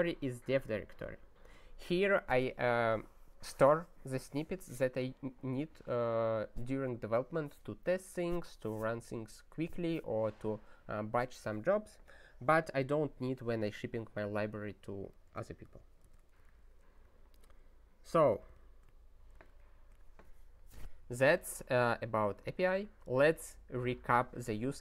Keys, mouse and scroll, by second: 16.4 super+o, 18.3 super+b, 19.4 click, 22.1-24.8 scroll down 40.